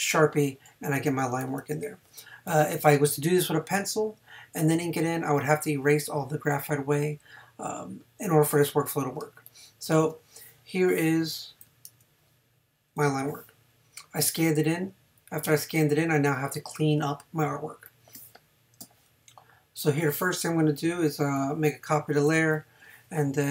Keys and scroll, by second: 9.2 space, 21.9 super+j.